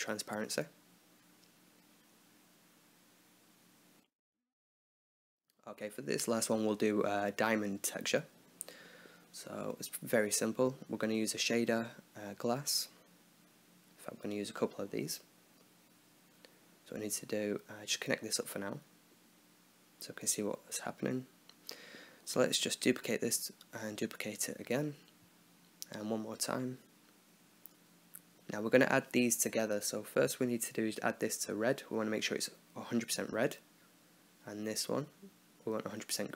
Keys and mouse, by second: 1.2-2.2 middle drag, 3.8 alt+h, 4.1 click, 5.1 click, 7.2-8.6 right drag, 8.6 click, 8.6 x, 9.1 shift+a, 14.2-15.3 drag, 17.3-19.2 drag, 19.5 click, 20.4 click, 22.7 shift+d, 23.8 shift+d, 25.6 shift+d, 26.9 click, 27.5 click, 27.7 middle click, 29.2-30.4 middle drag, 34.9 click.